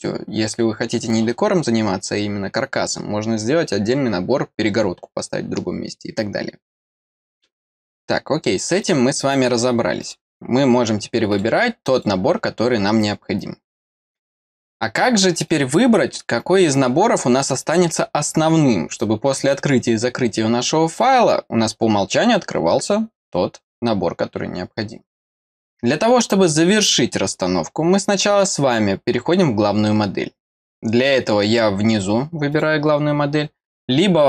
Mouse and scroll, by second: 8.8 click, 10.0 click, 11.3 click, 11.9 click, 15.4 click, 25.5 click, 28.3 click, 32.5 click.